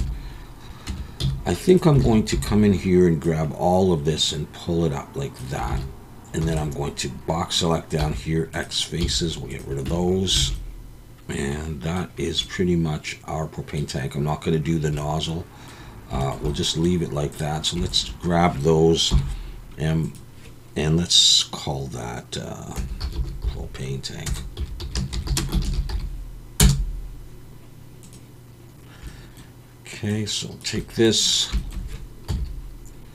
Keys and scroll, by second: 0.9 Tab, 1.2 z, 2.0 alt+a, 2.3 b, 5.7 alt+a, 6.4 b, 8.0 x, 9.0 z, 9.9 Tab, 10.4 alt+a, 19.1 m, 32.3 KP_1.